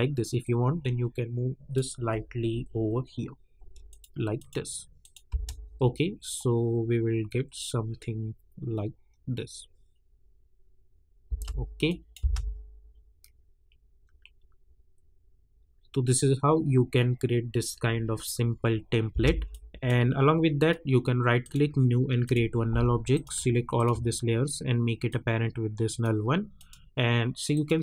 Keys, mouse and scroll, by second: 5.3 space, 11.2 space, 11.8 click, 12.2 space, 19.1 space, 19.8-20.1 drag, 20.5 right click, 21.4 click, 23.7 shift+click, 25.3-26.5 drag.